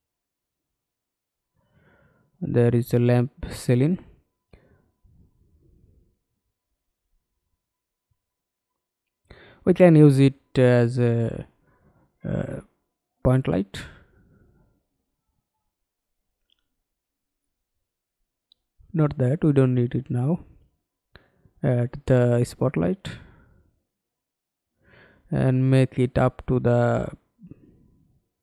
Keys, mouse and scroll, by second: 10.3 Delete, 17.2 alt+click, 19.7 Delete.